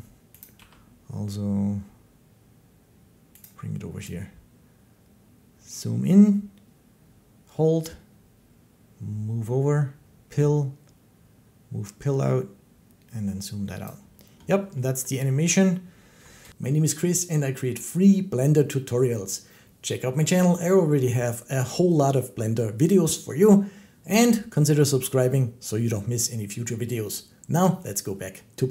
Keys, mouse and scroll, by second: 0.2 click, 0.4 g, 3.3 click, 13.6 click, 14.9 middle click, 16.2 ctrl+s.